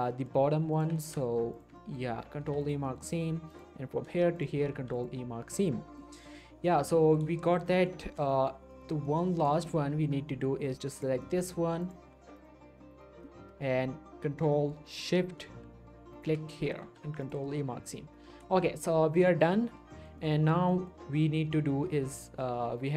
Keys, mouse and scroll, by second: 0.7 alt+shift+click, 1.8 shift+middle click, 2.4 ctrl+e, 2.6 ctrl+click, 2.8 scroll up 1, 3.5 click, 4.4 ctrl+shift+click, 4.7 ctrl+e, 4.9 ctrl+click, 6.0 middle click, 6.8 scroll down 1, 6.9 middle click, 7.7 scroll down 1, 7.7 middle click, 8.0 shift+middle click, 8.2-8.6 shift+scroll up 2, 8.3 middle click, 8.7 middle click, 9.1 shift+middle click, 9.7 middle click, 11.0 click, 11.4-11.8 scroll up 1, 13.2 middle click, 14.5 middle click, 14.8 scroll up 1, 16.1 ctrl+shift+click, 16.8 ctrl+e, 17.2 click, 17.5 scroll down 1, 17.6 middle click, 17.8 scroll up 1, 18.0 scroll down 1, 18.1 middle click, 18.6 shift+middle click, 19.7 scroll up 1, 19.9 shift+middle click, 20.2 middle click, 20.4 Tab, 20.7 middle click.